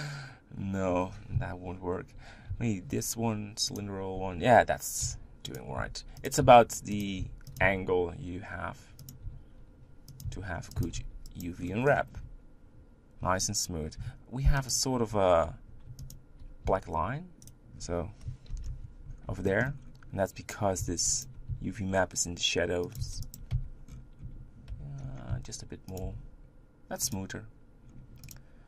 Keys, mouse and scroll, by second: 1.3 KP_1, 3.8 u, 5.0-7.6 typing, 9.3 g, 10.8 s, 11.6 middle click, 12.1 Tab, 13.2 Tab, 14.7 alt+shift+click, 16.1 alt+click, 16.7 s, 18.5 ctrl+l, 19.4 shift+middle click, 19.7-20.8 scroll up 3, 20.8 g, 21.5 s, 22.9 g, 23.5 Tab, 24.0 scroll down 5, 24.2 scroll up 1, 24.7 Tab, 25.3 s, 26.0 Tab, 27.2 click, 27.9 scroll down 1, 28.3 click.